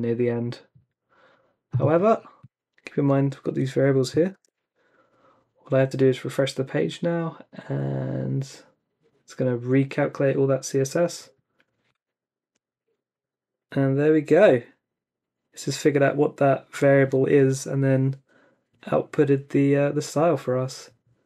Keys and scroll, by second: 4.3 super+r.